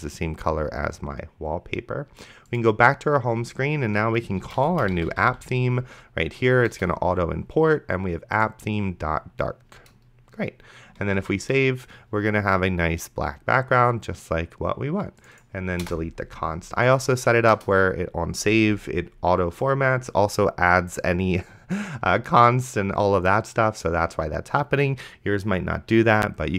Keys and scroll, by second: 4.6-5.8 typing, 6.7 Return, 11.4 ctrl+s, 16.1 BackSpace, 17.6 Return.